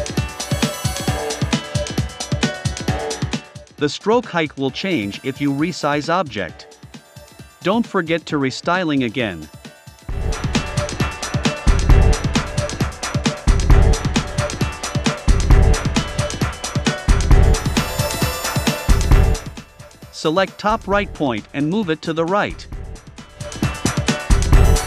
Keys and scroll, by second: 3.9 i, 5.5 v, 18.8 a, 20.6 shift+Right, 24.1 shift+Left.